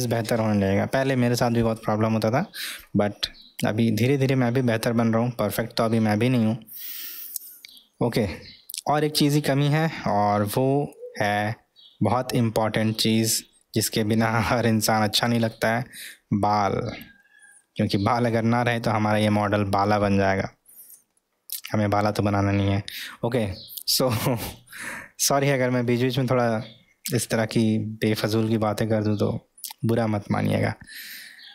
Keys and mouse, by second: 2.0-9.0 middle drag, 9.7-10.1 middle drag, 10.4-11.1 middle drag, 12.4-13.1 middle drag, 13.6-15.1 middle drag, 16.6-17.1 middle drag, 17.9 middle click, 18.6-19.8 middle drag, 20.4-21.0 middle drag, 21.1-22.1 middle drag, 27.1 3, 28.2-28.6 middle drag.